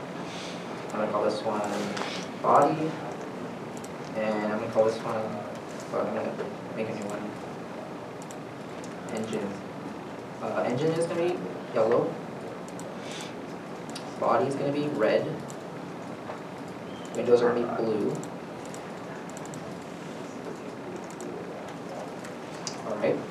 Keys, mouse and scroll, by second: 2.4 typing, 2.8 Return, 9.1 Return, 9.2 e, 9.2 n, 9.5 Return, 23.1 Return.